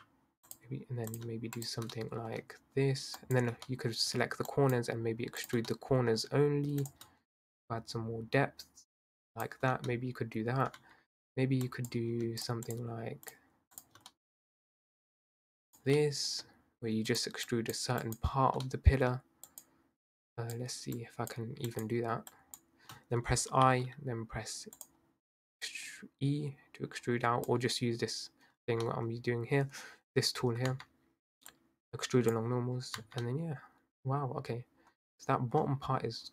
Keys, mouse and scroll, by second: 1.1 click, 1.5 shift+click, 2.0-3.2 middle drag, 3.2 shift+click, 3.7 middle click, 4.5 shift+click, 5.4 shift+click, 5.7-6.8 middle drag, 6.8 shift+click, 7.5 click, 9.7 Tab, 9.9-10.8 middle drag, 10.8 Tab, 11.7 click, 12.4 shift+drag, 12.7 shift+click, 13.3 shift+click, 13.8 shift+click, 14.1-15.2 middle drag, 15.2 shift+click, 16.0-17.1 middle drag, 17.1 shift+click, 18.0 shift+click, 18.7 middle click, 19.5 shift+click, 20.2 shift+click, 20.9 shift+click, 21.7 shift+click, 22.3 shift+click, 23.5 i, 25.7 click, 28.7 Tab, 28.9-29.9 middle drag, 29.9-30.7 scroll down 2, 30.7 Tab, 31.5-33.0 drag, 33.0 Tab, 33.2-36.3 middle drag.